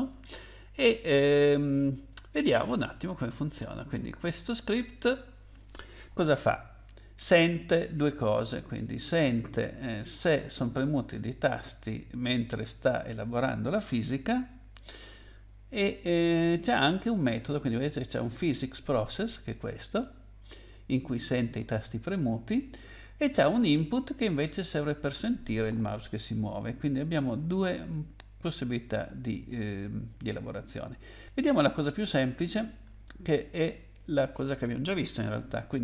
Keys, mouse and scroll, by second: 2.0-3.4 scroll down 8, 3.5-4.3 scroll up 8, 19.1 click, 23.8 click, 31.3 click.